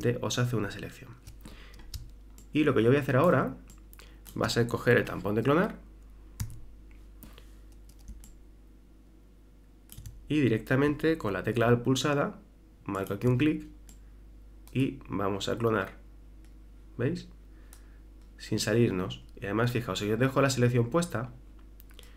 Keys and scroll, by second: 0.5 super+-, 2.0 super+space, 6.4 s.